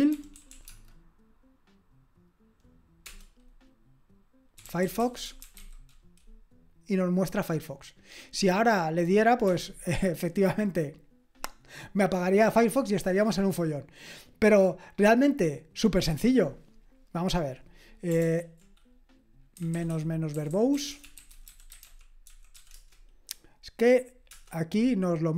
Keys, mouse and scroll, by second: 0.0-0.9 typing, 4.4-6.0 typing, 9.4 Escape, 18.2 ctrl+p, 19.4-23.0 typing.